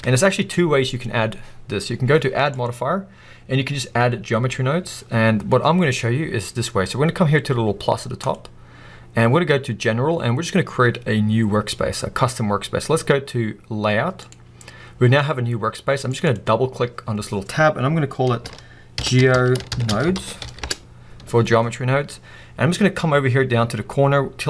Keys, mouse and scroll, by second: 16.1-24.4 drag.